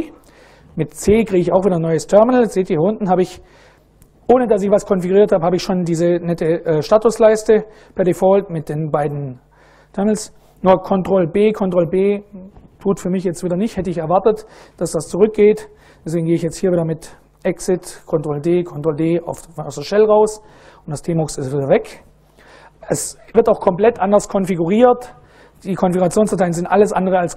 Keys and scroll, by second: 0.7 c, 11.0 ctrl+b, 11.3 ctrl+b, 17.1 ctrl+d, 18.3 ctrl+d.